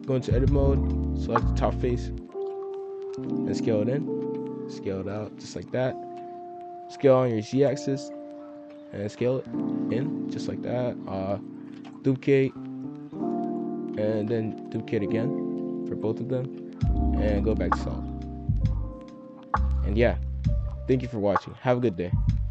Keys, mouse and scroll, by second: 0.5 shift+middle click, 0.8 scroll up 2, 0.9 z, 1.8 scroll up 2, 2.2 click, 2.4 b, 3.2 s, 4.2 a, 4.6 s, 8.6 s, 9.1 g, 9.9 s, 11.7 shift+d, 12.3 click, 13.2 scroll up 1, 13.3 middle click, 13.6-13.9 scroll down 1, 13.9 a, 14.3 shift+d, 15.1 click, 16.1 middle click, 16.5 z, 18.6-19.3 drag, 19.3 scroll down 4, 19.5 scroll up 1, 19.6 middle click, 19.9 click, 20.2-20.6 middle drag, 20.6 scroll down 2, 20.8-22.5 middle drag.